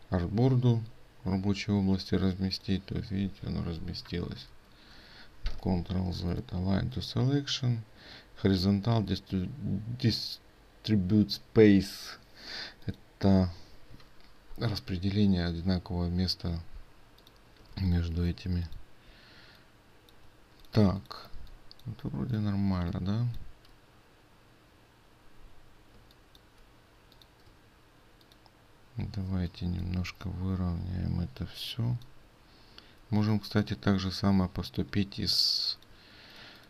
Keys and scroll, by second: 4.6 ctrl+z.